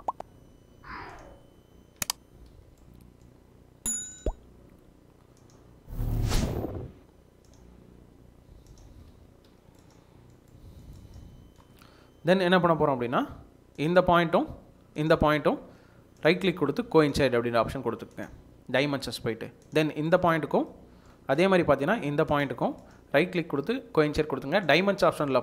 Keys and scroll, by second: 1.9 Escape, 8.8 Escape, 9.4 Escape.